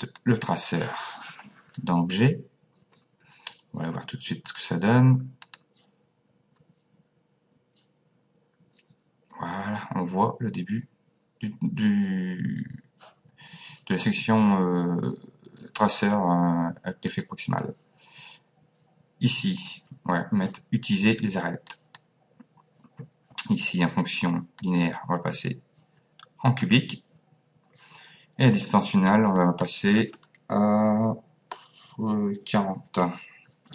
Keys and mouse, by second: 0.2 click, 4.5 click, 17.1 click, 21.7 click, 24.6 click, 29.4 click, 32.4 KP_4, 32.9 KP_0.